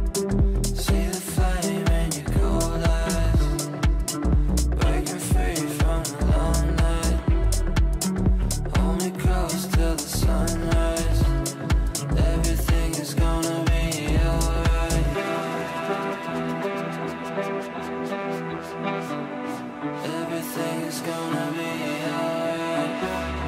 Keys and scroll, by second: 3.0 Delete, 7.4 ctrl+r.